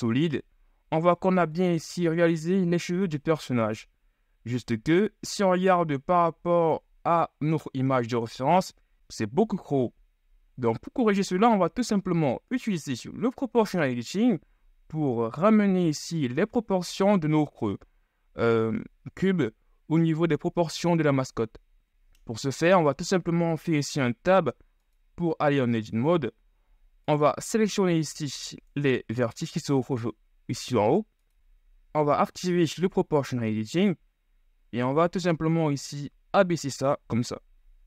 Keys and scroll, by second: 8.5 z, 23.9 Tab, 29.4 c.